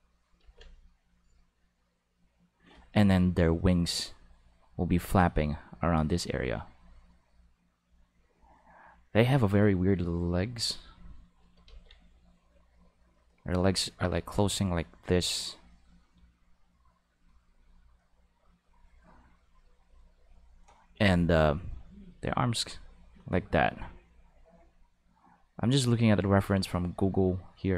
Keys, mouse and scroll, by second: 1.1 click, 2.1 click, 4.0 click, 4.6 click, 5.7 click, 6.2 click, 10.0 click, 10.6 click, 11.6 ctrl+z, 13.1 click, 13.8 click, 14.8 click, 15.6 click, 16.5 click, 17.8 click, 18.3 click, 18.7 click, 19.1 click, 19.6 click, 20.0 click, 22.5-23.6 drag, 25.5 click, 26.2 click, 27.2 click, 27.3 click.